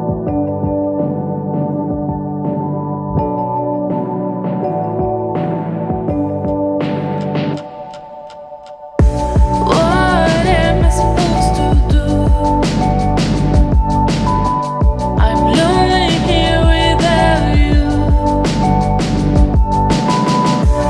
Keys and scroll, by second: 8.8 ctrl+d, 12.2 ctrl+d.